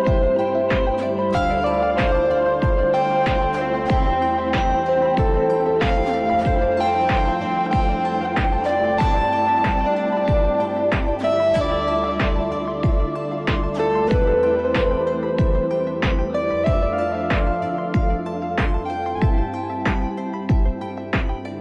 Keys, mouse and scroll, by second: 0.1-2.0 alt+scroll, 2.0-2.4 alt+scroll down 1, 3.1 click, 3.5 Down, 3.5 Left, 3.5 alt+scroll, 3.7 Left, 3.9 Down, 3.9 Down, 4.2 Left, 4.4 Left, 5.0-5.5 alt+scroll, 7.5 click, 8.5 ctrl+u, 12.6 click, 16.6 click, 19.7 click.